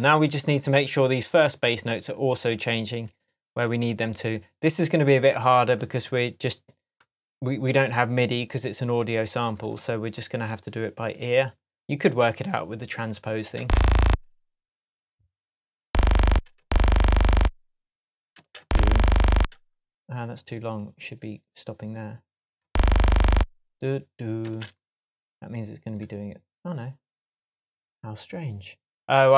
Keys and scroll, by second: 13.6 space, 22.6 space, 24.4 space.